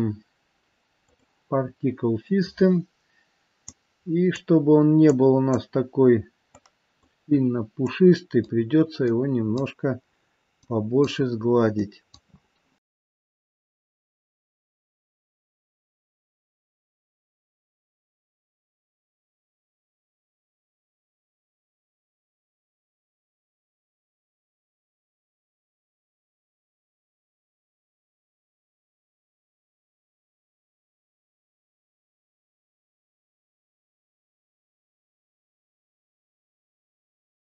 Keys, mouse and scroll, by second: 1.7 scroll down 3, 3.7 click, 5.1 click, 6.6 click, 8.0 click, 9.2 click, 10.7 click, 11.8 click, 12.9 click, 13.2 click, 13.6 click, 14.1 click, 14.3 middle click, 14.6 click, 14.9 click, 15.3 click, 15.6 click, 15.8 middle click, 16.5 click, 16.9 scroll up 1, 17.2 click, 17.6 click, 17.9 click, 18.5 click, 18.8 click, 19.1 click, 19.5 click, 19.9 click, 20.3 click, 21.0 click, 21.4 click, 21.9 click, 22.2 scroll down 1, 22.3 middle click, 22.7 scroll up 1, 23.0-23.5 scroll down 1, 23.8 click, 24.1 middle click, 24.5 scroll up 2, 24.6 scroll down 2, 24.8 middle click, 26.1 KP_1, 26.3 scroll up 1, 26.6 shift+middle click, 26.8 middle click, 27.3 middle click, 27.7 middle click, 28.5 click, 29.0 click, 30.0 click, 30.1 middle click, 30.8 click, 31.5 click, 31.9 middle click, 32.7 click, 33.0 middle click, 33.6 scroll down 2, 33.9 middle click, 34.4 scroll down 1, 34.5-35.0 scroll up 3, 34.8 shift+middle click, 35.1 click, 35.5 click, 35.7 middle click, 36.0 middle click, 36.3-36.8 scroll down 2, 36.8 click, 37.2 click, 37.4 click.